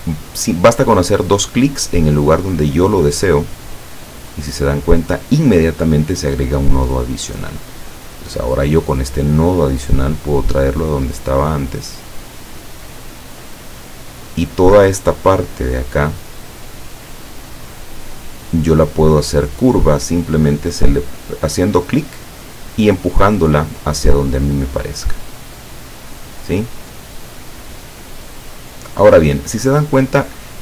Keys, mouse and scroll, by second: 3.7 click, 9.0-13.2 drag, 24.2-28.3 drag.